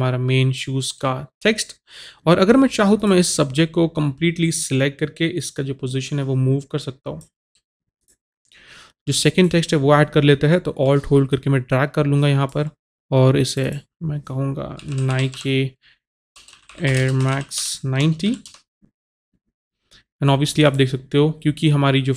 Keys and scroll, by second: 14.8-18.5 typing.